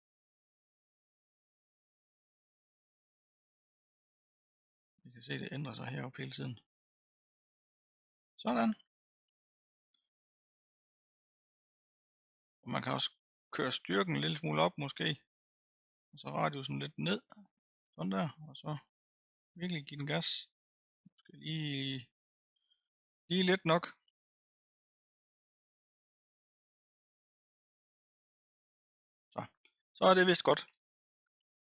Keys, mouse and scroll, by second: 1.6-2.6 middle drag, 2.6-8.0 drag, 8.0 middle click, 8.5 scroll down 2, 8.9-9.2 scroll up 4, 9.5 middle click, 10.2-11.7 drag, 11.7-12.7 scroll up 2, 14.0-29.2 drag, 29.2-30.3 scroll down 2.